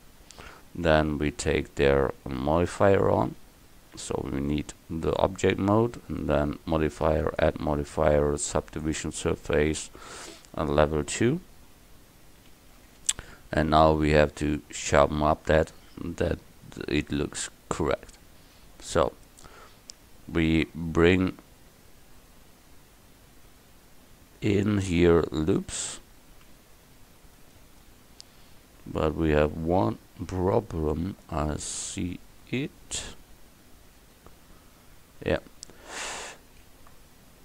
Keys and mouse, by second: 2.7 Tab, 9.1-10.4 drag, 18.6 Tab, 26.3 ctrl+r, 36.7 ctrl+r.